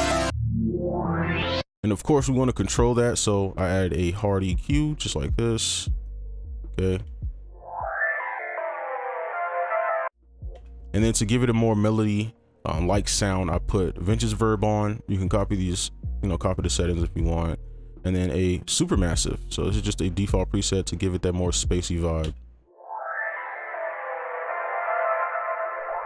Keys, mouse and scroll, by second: 1.6 space, 7.0 space, 10.5 space, 17.6 double click, 22.2 space.